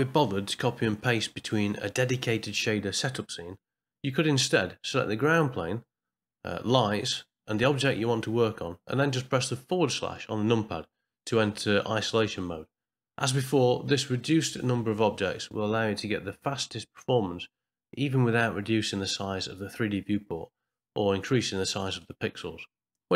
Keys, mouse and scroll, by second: 2.2 middle click, 5.9 click, 11.4 middle click, 12.6 ctrl+middle click, 15.0 click, 18.3 middle click, 20.9 middle click.